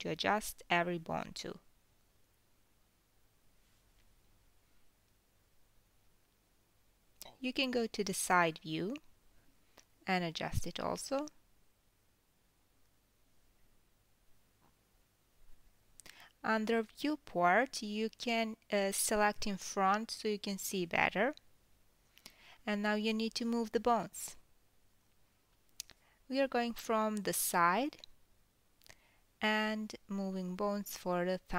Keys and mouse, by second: 2.2 s, 7.3 g, 10.1-11.5 middle drag, 11.7 middle drag, 11.9 middle drag, 12.9-14.5 middle drag, 13.1 KP_3, 14.1 g, 15.9-20.2 middle drag, 20.2 click, 20.4-21.5 middle drag, 21.5-22.7 drag, 22.7-28.5 middle drag, 26.6 KP_3, 28.9 click, 30.3 l, 31.1 g.